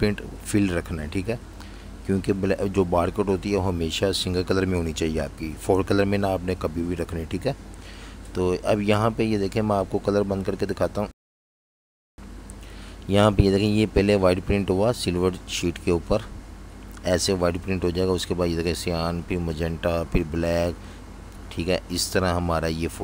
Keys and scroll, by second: 5.0 super+-, 5.2 super+-, 6.0-6.6 typing, 22.9-23.0 typing.